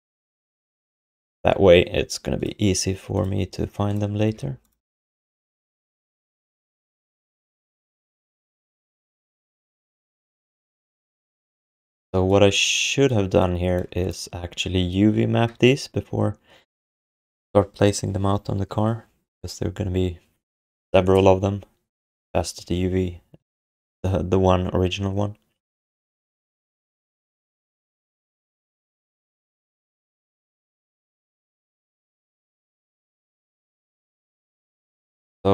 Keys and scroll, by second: 4.3 ctrl+s, 5.0 f, 8.5 alt+shift+d, 8.8 ctrl+s, 33.3 ctrl+s.